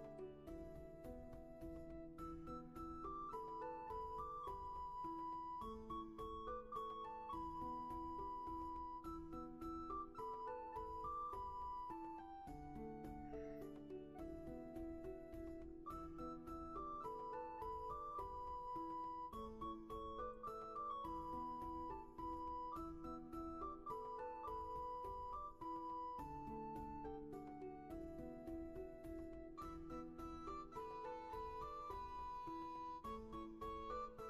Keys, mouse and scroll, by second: 2.3 ctrl+z, 5.0-6.6 scroll up 1, 11.6 scroll down 1, 11.8 ctrl+z, 12.7 scroll down 1, 13.1 scroll up 1, 14.0 shift+space, 18.7 ctrl+z, 22.3 ctrl+z, 25.0-26.6 scroll down 1, 27.3 ctrl+z, 29.2 ctrl+z, 31.4 ctrl+z.